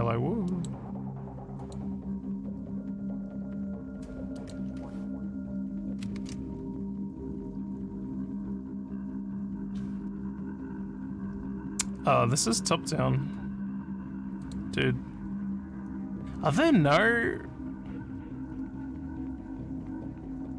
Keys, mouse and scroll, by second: 0.5 middle click, 1.6 click, 4.3 click, 6.2 ctrl+w, 11.7 scroll up 1, 13.0 scroll up 1, 14.4 click, 20.0 scroll down 2.